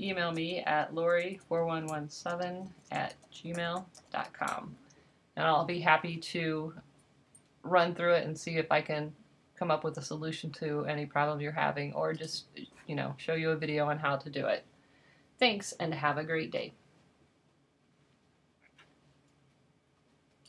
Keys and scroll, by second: 0.0-4.7 typing.